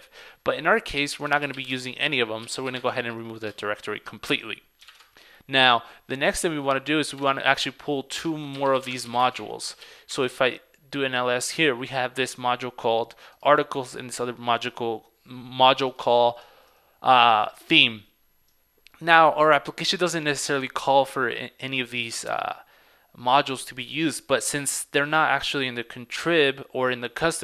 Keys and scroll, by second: 5.0 super+Tab, 7.3 super+Tab.